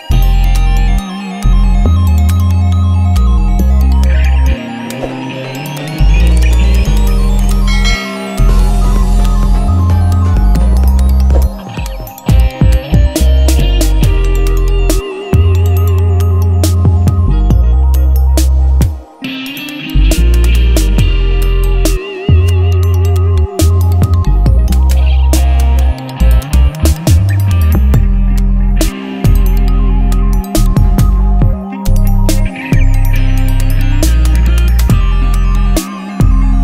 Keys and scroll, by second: 1.6 ctrl+Tab, 6.5 ctrl+t, 9.7 Return, 9.9 v, 10.0 Up, 11.6 ctrl+t, 11.8 Up, 12.4 Right, 12.8 Down, 15.3 Return, 15.6 Up, 16.0 Right, 16.5 Left, 18.3 ctrl+t, 20.8 Return, 24.4 t, 25.9-29.2 typing, 29.4 ctrl+Return, 30.1 ctrl+t, 35.1 Return.